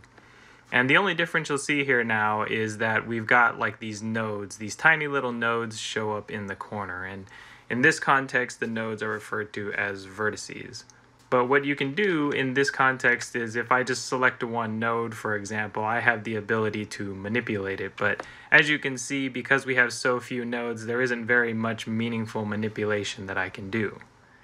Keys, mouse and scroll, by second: 13.1 g.